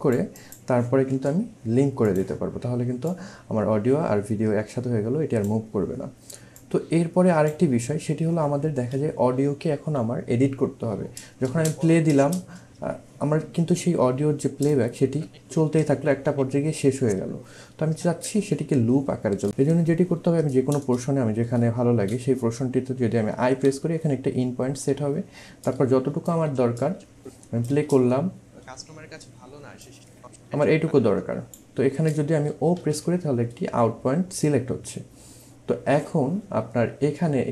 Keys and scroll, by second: 11.5 space, 12.1 space, 23.4 |, 27.8 space, 32.8 o.